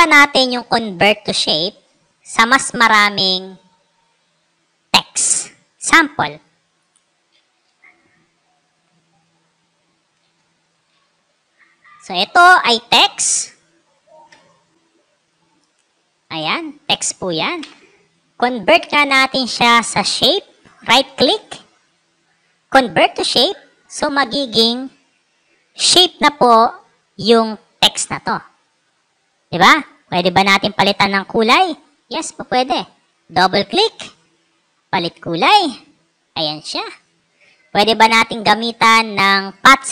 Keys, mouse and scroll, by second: 6.2 click, 9.9-11.3 typing, 12.9 ctrl+click, 15.1 click, 15.9 click, 18.0 click, 20.6 right click, 22.8 click, 29.5 click, 29.7 click, 32.1 Escape, 33.4 click, 33.5 click, 34.9 click, 35.4 click, 36.3 click, 37.9 click, 38.3 right click, 39.4 click.